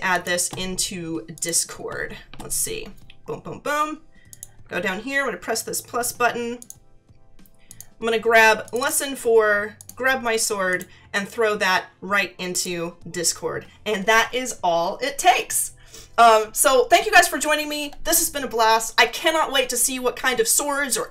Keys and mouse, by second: 0.1 click, 1.3 click, 4.3 click, 6.6 click, 7.7 click, 12.5 click.